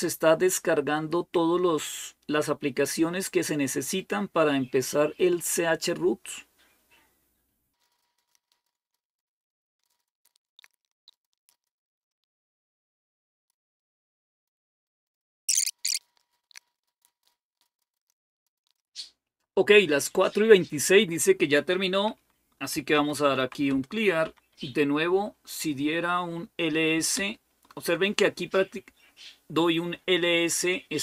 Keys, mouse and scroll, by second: 22.3-23.7 typing, 24.0 Up, 24.4 Up, 25.1 Up, 26.9 Return, 28.2 typing.